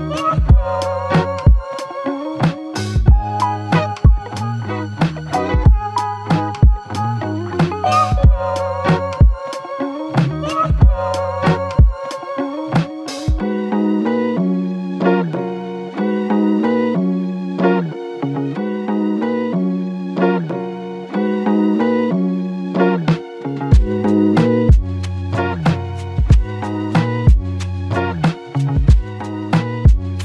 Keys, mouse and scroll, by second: 1.9 typing, 4.7 double click, 11.9 s, 18.7 f, 18.8 shift+click, 23.4 alt+click, 25.2 alt+shift+click, 26.1-26.5 typing, 29.6 typing.